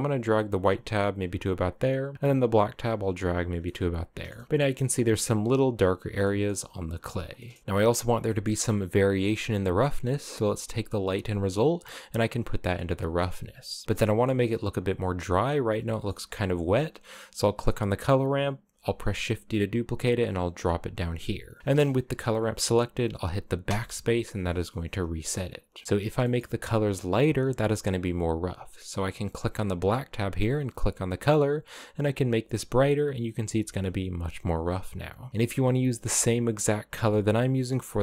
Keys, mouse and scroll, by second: 2.8-3.3 scroll down 2, 3.3-4.0 shift+middle drag, 4.0-4.4 scroll up 5, 4.4-5.6 shift+middle drag, 5.6 scroll down 6, 5.9 shift+middle click, 6.6-7.0 scroll down 6, 7.0 middle click, 7.6-7.9 scroll up 1, 7.9-9.0 middle drag, 9.0 click, 10.6 click, 13.8-15.4 shift+middle drag, 15.4 scroll up 5, 15.6-17.0 shift+middle drag, 17.0-18.4 right drag, 18.5 shift+d, 20.2 click, 21.0-21.6 scroll up 1, 21.6 click, 23.3 BackSpace, 24.0 scroll up 1, 25.9 middle click, 26.8-27.7 scroll up 1, 30.3 click, 35.3 click, 37.2-37.6 scroll up 4, 37.6 click.